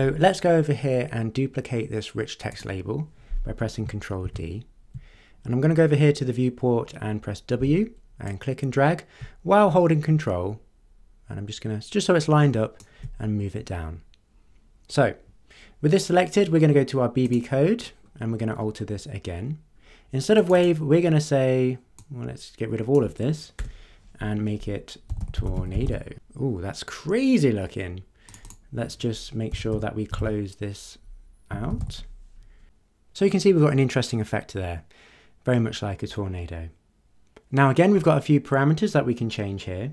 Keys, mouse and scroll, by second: 2.5 click, 4.2 ctrl+d, 7.6 w, 8.3-13.0 drag, 17.2 click, 18.0-18.4 scroll down 1, 19.5 scroll down 2, 20.4 click, 22.0-23.1 drag, 23.6 BackSpace, 24.8-26.3 typing, 28.3 click, 29.2-32.3 typing.